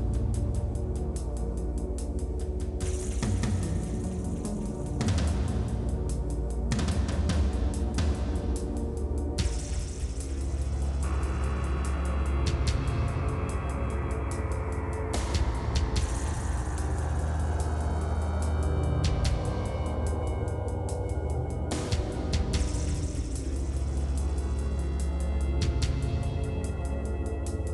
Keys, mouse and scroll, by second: 0.0-1.1 drag, 1.1 scroll down 3, 1.5 click, 2.5 Tab, 2.9 alt+h, 3.9 shift+click, 4.1 middle click, 4.6 g, 6.4 middle click, 7.3 click, 11.1-12.5 drag, 12.5-13.0 scroll down 4, 13.3 shift+h, 13.8 middle click, 15.2-16.3 drag, 16.4 click, 16.9 middle click, 17.4 shift+click, 17.8 middle click, 18.2 ctrl+KP_Add, 18.3 ctrl+KP_Add, 21.0 middle click, 21.7 ctrl+KP_Subtract, 22.3 middle click, 22.6-23.8 drag, 24.6 ctrl+z, 25.6-27.2 drag, 27.2 click.